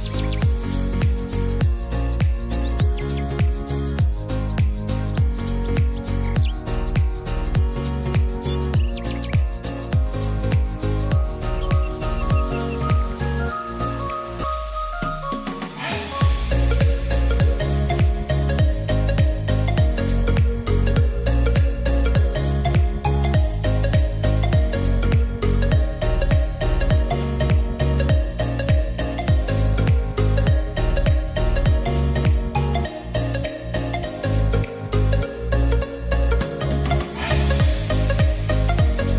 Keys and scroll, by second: 12.6 ctrl+z.